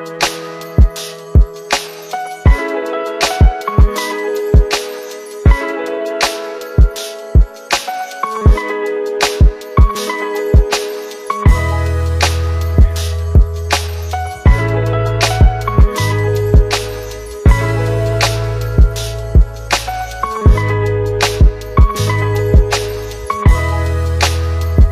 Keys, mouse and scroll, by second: 8.4 click, 9.5 click, 11.7-12.9 drag, 15.7 ctrl+z, 20.2 click, 21.3 click, 24.3-24.9 click.